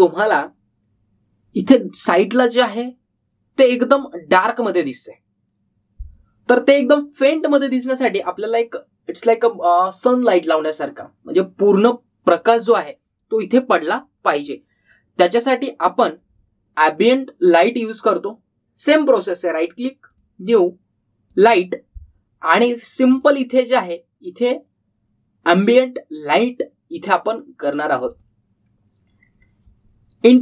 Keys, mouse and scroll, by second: 2.9-4.4 scroll down 1, 20.0 right click, 21.0 click, 28.8-29.6 typing, 29.1 click.